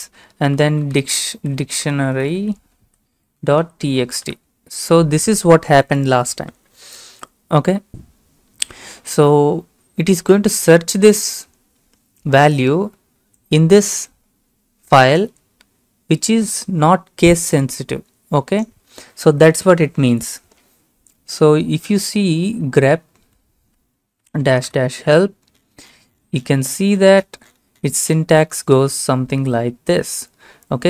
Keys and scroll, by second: 0.0-4.8 typing, 21.8 BackSpace, 22.3-24.4 BackSpace, 24.4 Right, 24.7 Return.